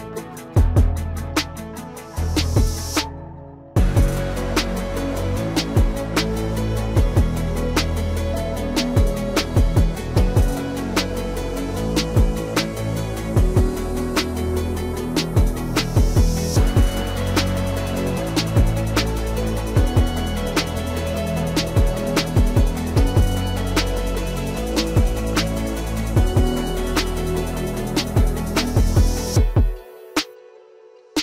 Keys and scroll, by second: 27.2 F4.